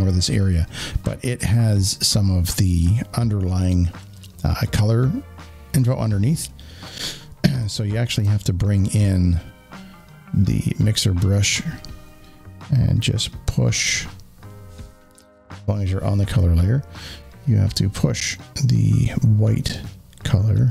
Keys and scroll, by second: 7.5 w.